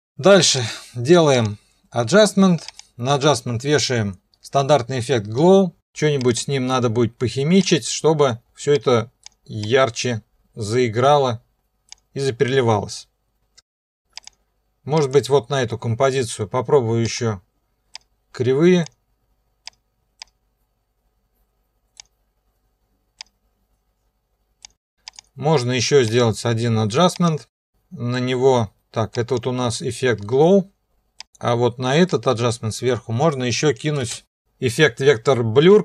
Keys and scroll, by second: 34.0 ctrl+space.